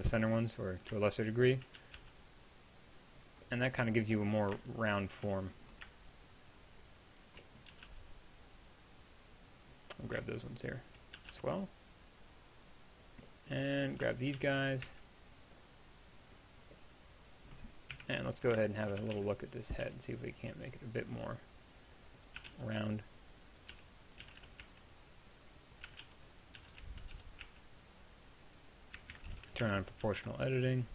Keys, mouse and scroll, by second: 1.8 g, 7.7 g, 11.2 g, 18.0 KP_1, 19.0 a, 19.2 b, 19.8 g, 22.4 a, 22.5 b, 23.7 g, 24.2 g, 25.9 a, 26.6 g, 26.6 b, 29.2 ctrl+z, 30.0 g.